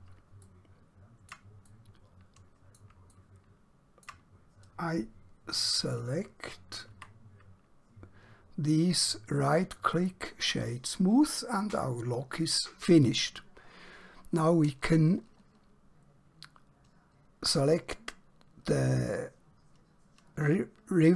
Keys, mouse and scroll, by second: 0.5 shift+middle click, 1.7 middle click, 3.2 middle click, 7.0 Tab, 8.9 right click, 9.9 click.